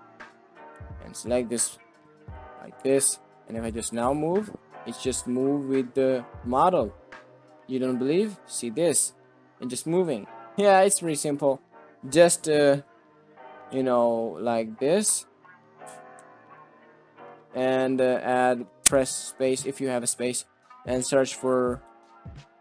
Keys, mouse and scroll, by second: 0.9 shift+click, 1.8 ctrl+p, 2.9 alt+z, 3.1 click, 3.6 r, 7.7 g, 10.7 middle drag, 11.5-12.5 middle drag, 12.8 middle drag, 13.4 middle click, 13.7 shift+middle click, 14.4 middle click, 16.1 Tab, 18.2 click, 18.6 space.